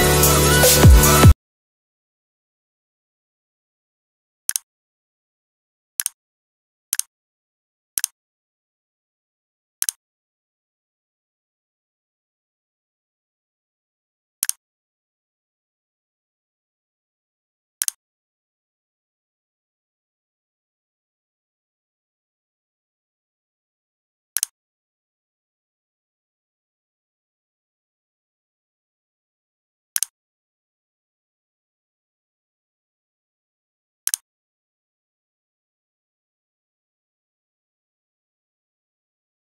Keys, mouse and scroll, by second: 0.2 click.